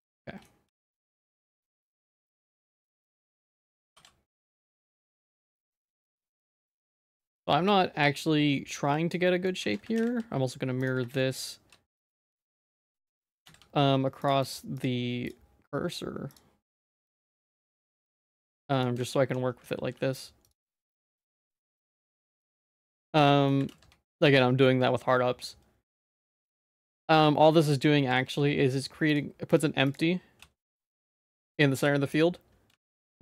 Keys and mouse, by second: 0.7 Tab, 1.0 middle click, 1.6 g, 2.3 g, 3.1 shift+middle click, 3.4 shift+middle click, 3.9 ctrl+r, 5.9 g, 6.6 3, 7.3 middle click, 7.6 e, 8.9 middle click, 9.2 shift+middle click, 9.6 Tab, 10.0 alt+x, 11.1 shift+s, 12.3 alt+x, 13.4 alt+x, 14.2 click, 14.7 click, 15.2 click, 16.3 click, 17.2 Tab, 17.6 z, 18.0 1, 18.4 click, 19.0 z, 19.5 g, 20.5 Tab, 21.2 ctrl+s, 21.5 alt+x, 23.2 shift+middle click, 23.7 alt+x, 26.7 ctrl+s, 28.2 ctrl+s, 29.1 click, 29.8 click, 30.4 g, 31.3 click, 31.8 g, 32.7 g.